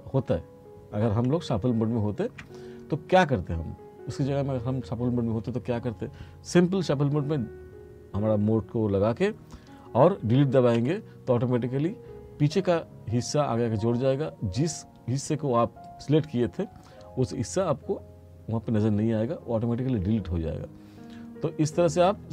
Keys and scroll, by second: 1.6 ctrl+z, 10.8 Delete.